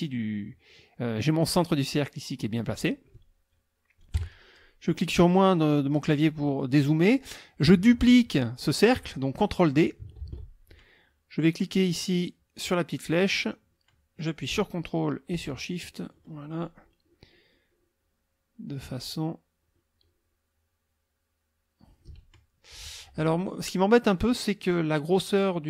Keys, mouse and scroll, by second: 4.2 KP_Subtract, 6.1-7.1 drag, 10.2 ctrl+d, 13.1-22.2 drag.